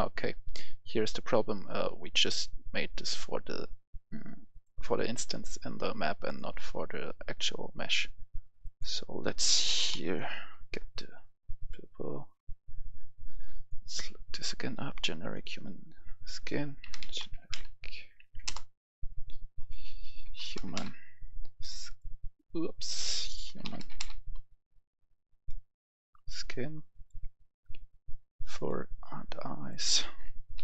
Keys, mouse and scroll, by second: 9.6 typing, 11.5 click, 14.1-14.6 scroll up 1, 15.3 click, 16.8 g, 16.9 e, 17.1 n, 17.4 e, 18.2 Down, 18.4 Return, 19.5-20.5 drag, 20.2-20.7 typing, 20.7 click, 21.8 click, 23.4-23.9 typing, 25.2-29.5 drag, 30.1-30.6 typing.